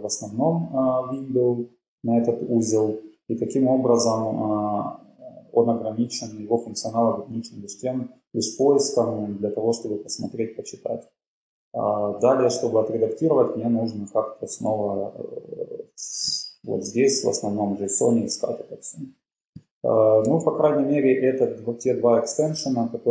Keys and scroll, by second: 20.3 super+w.